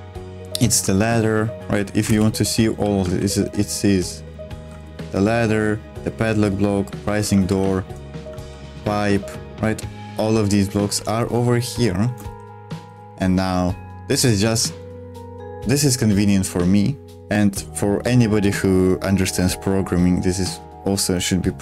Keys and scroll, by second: 1.8-3.4 typing, 4.7 ctrl+w, 7.5-10.9 typing, 12.2-13.4 typing.